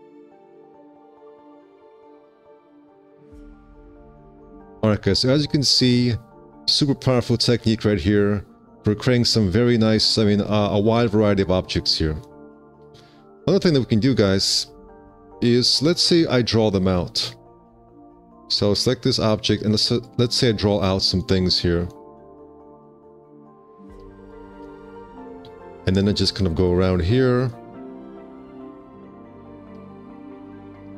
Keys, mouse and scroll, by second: 1.7 F4, 4.4 alt+q, 4.6 F4, 8.0 F4, 11.5 F4, 13.9 alt+q, 15.9 1.